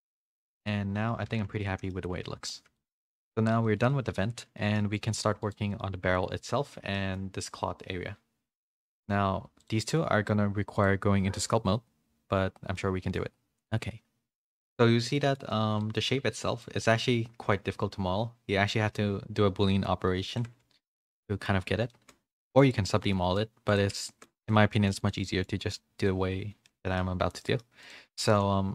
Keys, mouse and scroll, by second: 0.2 Tab, 0.4 a, 0.6 middle click, 0.6 a, 1.6 middle click, 1.6 a, 2.2 a, 2.2 middle click, 2.7 shift+middle click, 3.0 middle click, 3.6 middle click, 4.5 middle click, 5.1 click, 5.4 click, 7.0 middle click, 9.6-12.3 drag, 12.3 middle click, 13.0 middle click, 15.2 middle click, 15.8 middle click, 16.4 middle click, 20.3 click, 20.9 middle click, 20.9 a, 21.9 middle click, 22.3 middle click, 23.1 middle click, 24.0 shift+middle click, 24.5 middle click, 25.0 click, 25.2 middle click, 26.0-27.6 middle drag.